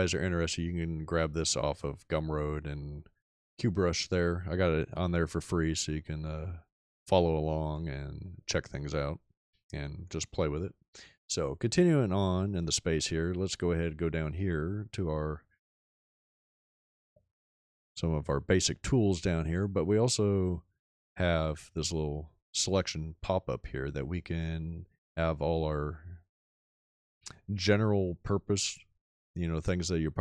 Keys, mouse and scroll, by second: 20.8 click.